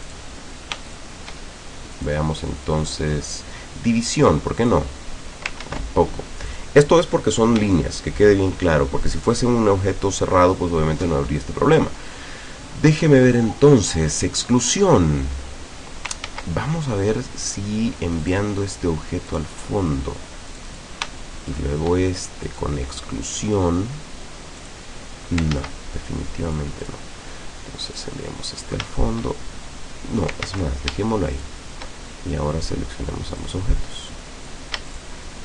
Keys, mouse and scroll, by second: 0.1 click, 0.9 shift+click, 2.0 click, 2.7 click, 4.7 click, 5.7 ctrl+z, 6.5 click, 7.7 shift+click, 8.7 shift+click, 11.5 click, 14.7 click, 16.3 ctrl+z, 18.3 click, 19.3 click, 20.5 click, 21.5 shift+click, 22.5 click, 24.7 click, 25.6 ctrl+z, 26.5-27.1 drag, 28.0 click, 30.5 ctrl+z, 31.4 shift+click, 33.5-34.7 drag, 34.9 shift+click.